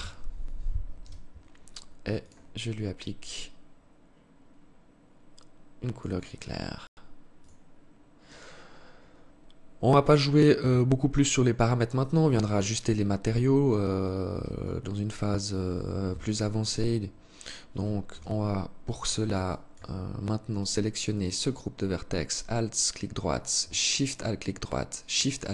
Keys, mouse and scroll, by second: 1.5 click, 7.2-7.8 scroll down 5, 7.8-8.2 scroll up 3, 8.2 scroll down 1, 9.4 scroll down 1, 11.2 scroll down 1, 13.8 alt+click, 15.3 KP_3, 15.9 Tab, 17.3 z, 18.6 alt+shift+click, 19.2 scroll up 3, 20.3 alt+right click, 23.1 alt+shift+right click.